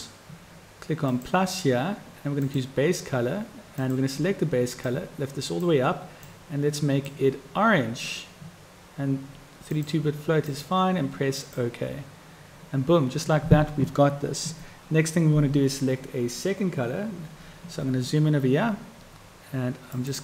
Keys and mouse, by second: 1.2-11.8 drag, 20.0 click.